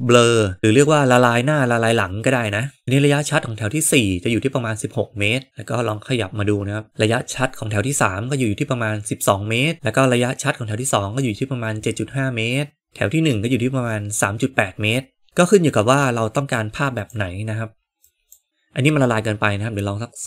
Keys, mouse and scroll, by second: 5.5-6.9 drag, 9.7-11.1 drag, 17.0-20.2 drag.